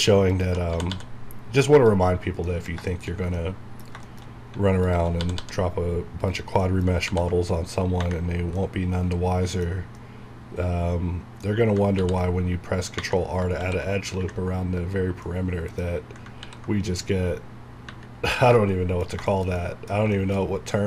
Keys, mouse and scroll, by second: 0.3 alt+click, 0.7-1.7 typing, 1.8 click, 2.1 scroll down 1, 2.5 middle click, 4.2 shift+scroll up 2, 4.9 alt+click, 5.2 typing, 6.3 click, 6.6 middle click, 7.1 ctrl+r, 8.3 scroll down 1, 8.6-12.0 middle drag, 12.0 ctrl+r, 13.6 ctrl+r, 15.2 middle click, 15.8-16.2 scroll down 1, 16.4 ctrl+r, 18.6 middle click, 19.9 scroll down 1, 20.1 shift+middle click, 20.5-20.8 scroll up 1.